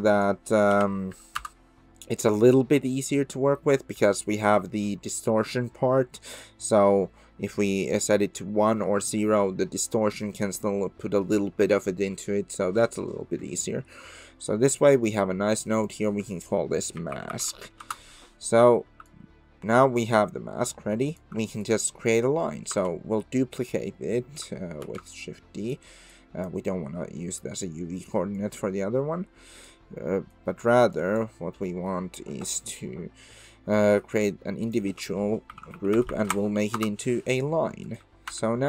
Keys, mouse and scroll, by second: 14.0 Tab, 15.8-18.7 drag, 19.1-21.2 shift+drag, 21.6 click, 22.7 ctrl+d, 23.9 click, 24.8 shift+d, 26.1 click, 28.5-29.7 drag, 30.6 click, 31.0 ctrl+right click, 31.8 click, 34.1 click, 34.6-37.5 drag, 38.3 Tab.